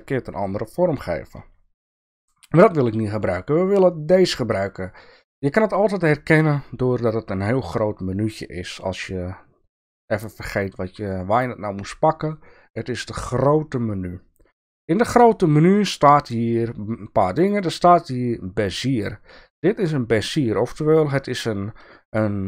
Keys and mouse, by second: 2.1-6.7 drag, 15.0-19.4 drag.